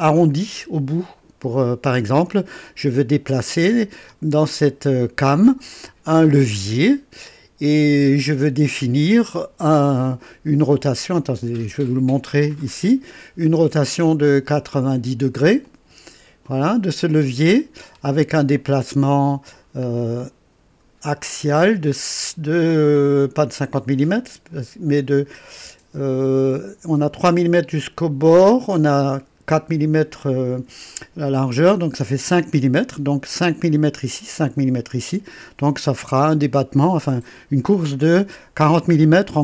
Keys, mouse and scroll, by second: 1.0-2.4 drag, 2.6 click, 6.9-8.4 drag, 10.2 click, 12.4 click, 14.7-15.4 scroll up 1, 15.6 click, 16.4 click, 17.9-18.2 scroll down 2, 18.5 click, 19.6 scroll down 1, 20.2 click, 22.9-23.2 scroll up 2.